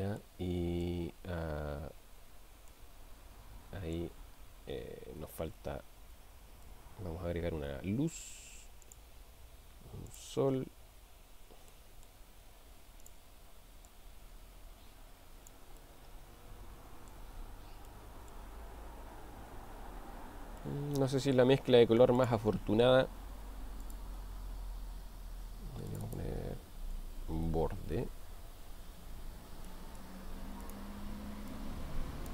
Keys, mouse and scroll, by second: 0.2-1.1 middle drag, 2.7-4.2 middle drag, 6.8 shift+a, 11.9-12.3 middle drag, 12.6 g, 13.9-15.6 drag, 16.0-17.2 middle drag, 17.9-18.4 middle drag, 20.6-21.4 middle drag, 22.2 click, 23.9 click, 25.9-29.1 drag, 29.7 middle click, 30.6 click.